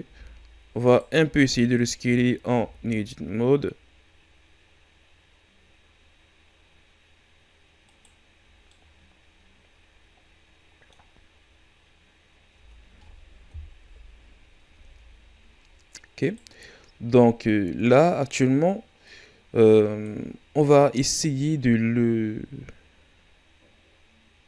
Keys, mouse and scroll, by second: 0.1 s, 1.3 Tab, 1.6 a, 1.9 a, 2.5 s, 8.7-11.7 middle drag, 12.6 Tab, 13.8 KP_1, 14.6 a, 15.2 ctrl+scroll down 1, 16.1 ctrl+scroll down 3, 16.2-17.1 right drag, 17.1-19.0 ctrl+scroll up 2, 19.0-24.4 drag.